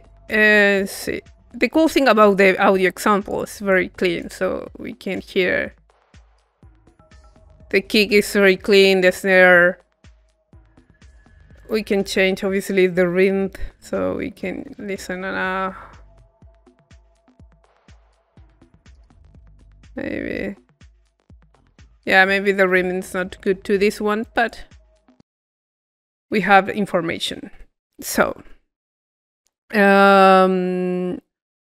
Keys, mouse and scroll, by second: 1.2 middle click, 2.0-3.9 drag, 4.0-6.0 drag, 11.6-12.6 drag, 12.8-23.7 drag, 22.8-24.2 middle drag, 24.2-25.7 drag, 25.7-28.1 middle drag, 28.9 middle click, 31.5-31.6 drag.